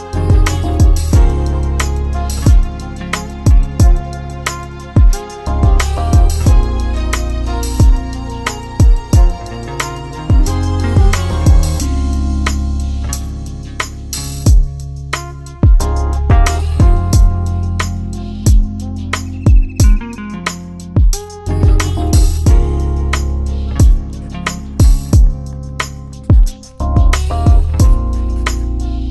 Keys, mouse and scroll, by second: 0.6 click, 2.1 click, 4.1 click, 5.0 click, 7.9 click, 10.0 click, 11.5 click, 12.5 click, 13.9-14.7 typing, 15.4 ctrl+a, 16.7 click, 18.7-19.1 typing, 19.7 Return, 21.7 click, 22.6-23.7 typing, 23.7 Return, 26.5 click.